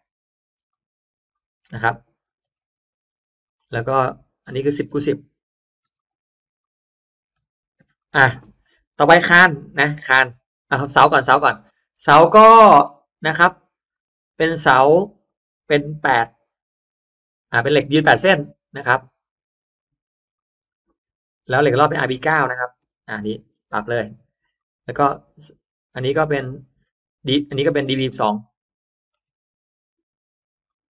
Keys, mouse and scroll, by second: 0.0-3.1 typing, 0.6 click, 1.2 click, 3.3 click, 4.5 click, 4.9 1, 5.9 click, 6.5 click, 7.2 1, 7.9 click, 10.5 click, 13.5 click, 15.1 click, 15.9 8, 16.1 click, 17.5 click, 17.8 8, 18.0 click, 18.2 8, 18.6 click, 19.7 click, 19.7 3, 20.3 click, 20.7 click, 20.7 3, 21.5 click, 23.5 9, 23.7 click, 23.9 9, 24.5 click, 27.9 click, 28.1 click, 29.1 BackSpace, 30.2 2, 30.5 click.